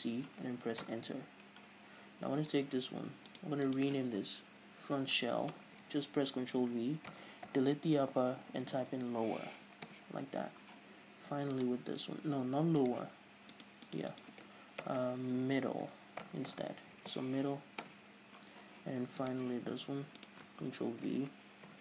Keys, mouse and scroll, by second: 3.1 right click, 13.4 right click, 19.8 right click.